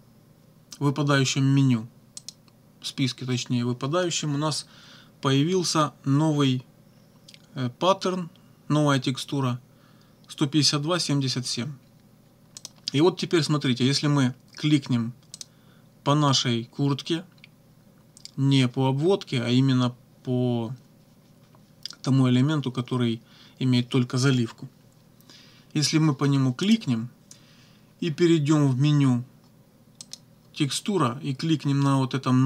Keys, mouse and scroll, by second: 2.2 click, 12.6 click, 15.3 click, 26.7 click, 30.1 click.